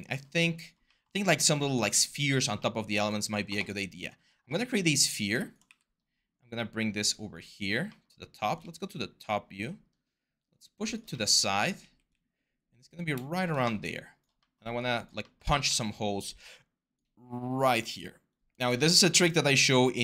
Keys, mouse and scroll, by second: 5.4 w, 11.5 r, 15.4 w.